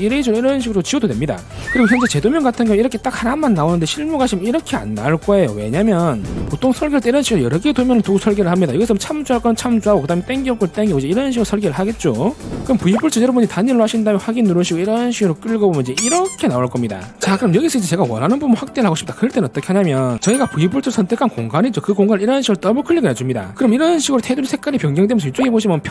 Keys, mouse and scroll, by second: 0.4 e, 0.5 right click, 0.7 click, 1.0 click, 1.2 right click, 13.5 click, 14.5 click, 15.4 click, 16.3 click.